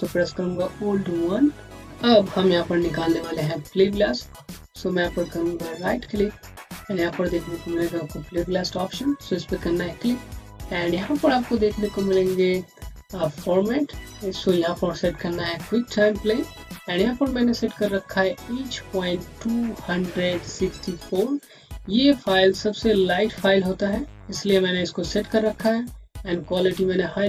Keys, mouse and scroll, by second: 1.2 1, 2.5-3.4 scroll up 1, 3.6 alt+middle click, 3.7 Home, 5.5 right click, 9.3 click, 11.6-12.0 scroll down 1, 12.0-14.0 scroll up 1, 14.0 click, 16.5 click.